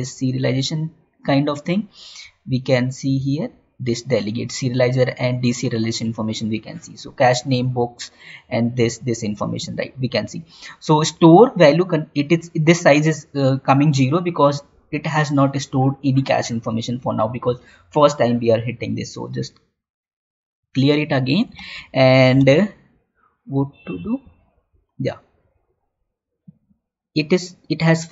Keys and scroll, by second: 21.6 alt+Tab, 22.7 Tab.